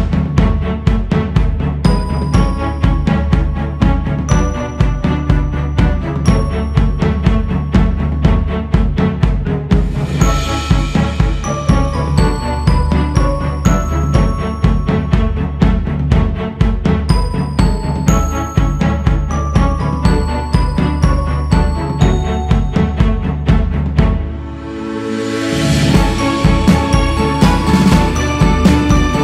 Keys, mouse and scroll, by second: 3.9-6.9 drag, 7.6 shift+s, 7.9 f, 8.9-11.9 drag, 11.9 scroll up 2, 12.1 click, 13.0 shift+c, 13.4 f, 14.6-15.1 scroll up 1, 15.2-23.3 drag, 23.9 click, 24.4 scroll up 4, 25.0-25.4 scroll up 2, 25.4-28.3 drag.